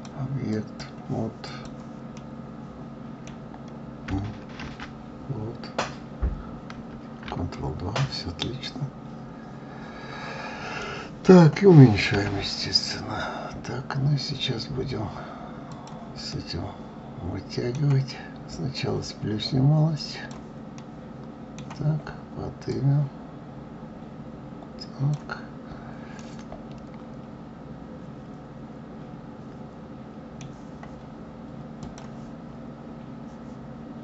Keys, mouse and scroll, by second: 2.1-4.6 middle drag, 4.6 ctrl+2, 6.7 ctrl+2, 7.5-10.5 middle drag, 16.3-18.7 middle drag, 18.7 click, 20.7-22.7 middle drag, 22.7 click, 26.2-29.3 middle drag, 31.8-34.0 drag.